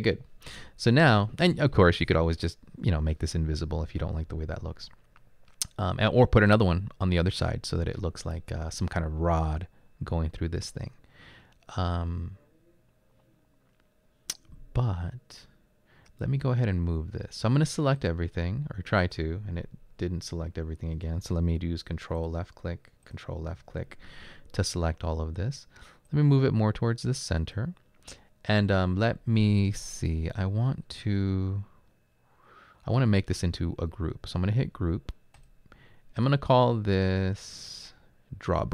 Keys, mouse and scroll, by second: 0.0-0.3 typing.